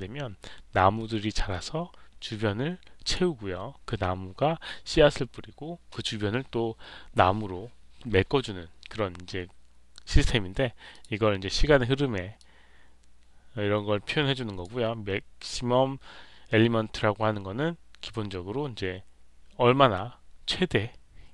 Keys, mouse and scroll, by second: 10.8 click, 12.3-14.5 drag.